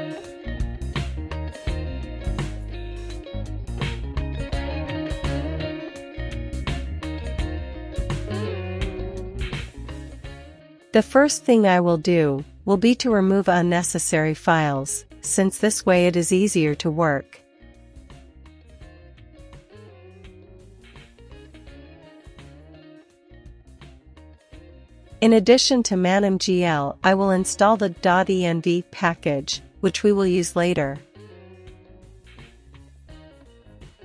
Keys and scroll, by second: 0.0-4.4 typing, 5.9 Return, 12.2 ctrl+l, 12.4-13.2 typing, 20.1 super+v, 22.1 Return, 23.5-24.3 typing, 29.8 super+c, 32.0 super+v, 32.6 Return.